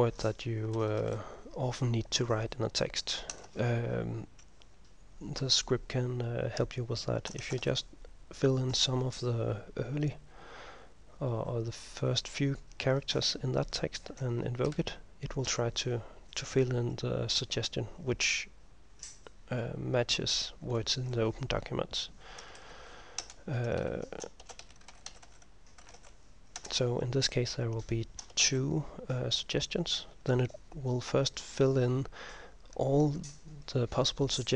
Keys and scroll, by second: 0.0-1.0 typing, 2.2 typing, 3.4 Return, 7.3-8.2 typing, 14.7 ctrl+m, 22.8 Home, 23.3 Return, 23.8 Up, 24.3-26.5 typing, 26.6 Return, 27.6-28.9 typing, 30.4 ctrl+m, 30.4 typing.